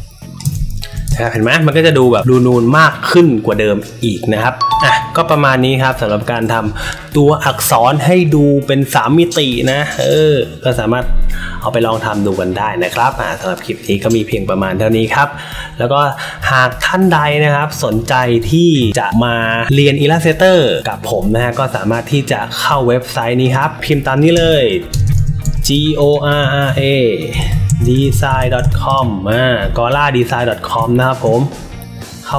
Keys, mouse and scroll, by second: 1.0 click, 1.0 space, 2.1 space, 2.1 click, 23.4 click, 24.3-29.1 typing.